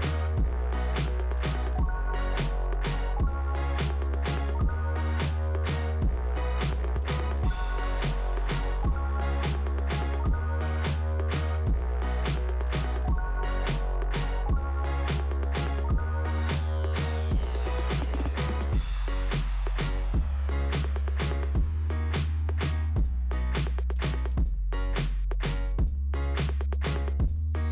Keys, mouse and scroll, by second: 0.5 click, 1.4 click, 2.6 scroll down 1, 4.9 click, 6.4 click, 8.6 click, 8.9 click, 10.0 click, 11.7 click, 12.6 scroll down 1, 13.4 middle click, 14.7 click, 15.1 scroll up 2, 16.5 scroll down 1, 19.6 click, 21.2 click, 22.9 click, 24.1 click, 25.8 click, 27.2 scroll down 2.